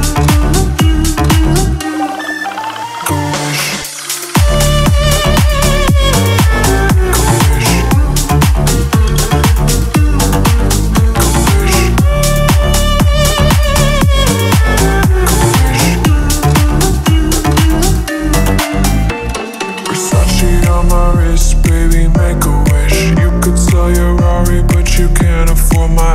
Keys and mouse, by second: 0.5-1.1 drag, 1.2-1.6 drag, 2.1 middle drag, 2.2 click, 3.0 middle click, 3.3-5.4 drag, 5.6 click, 6.1 middle click, 6.3 click, 6.5 drag, 7.1 middle click, 7.2 middle drag, 7.4 middle click, 7.9 middle drag, 8.3 middle click, 8.6 drag, 8.8 right click, 9.0 middle click, 9.8 middle click, 10.1 click, 10.6 click, 10.8 middle click, 11.0 click, 11.5 middle click, 12.3 middle click, 12.8 middle click, 13.0 middle click, 13.1 click, 13.3 middle click, 13.8 click, 14.1 click, 14.3 click, 14.4 click, 14.6 click, 18.7 middle click, 20.1-20.6 middle drag, 21.7 click, 22.0 middle click, 22.4 click, 22.6 click, 22.8 middle click, 23.8 middle click, 25.0 middle click, 25.8 middle click.